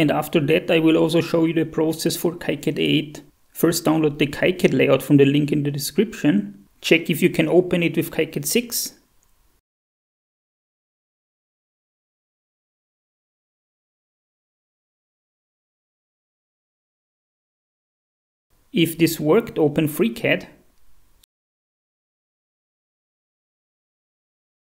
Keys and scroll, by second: 9.6 shift+F4.